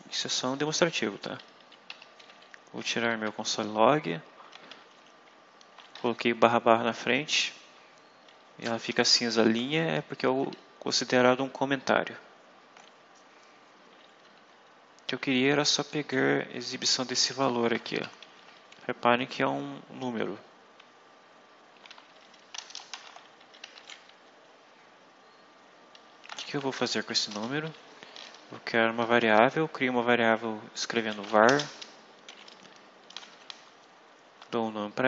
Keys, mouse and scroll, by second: 0.5 click, 1.8 Home, 2.2 Up, 4.4 /, 6.0 Left, 7.6 Right, 8.4 Left, 8.9 shift+End, 10.3 Home, 14.1 Right, 15.3 Left, 17.0 shift+End, 17.2 shift+Left, 18.1 shift+Delete, 21.6 ;, 22.4 BackSpace, 22.8 /, 23.3 Right, 23.5 End, 23.6 Left, 26.5 ctrl+shift+c, 26.8 ctrl+shift+End, 27.2 ctrl+shift+Return, 30.1 v, 30.8 a, 31.1 r, 31.4 space.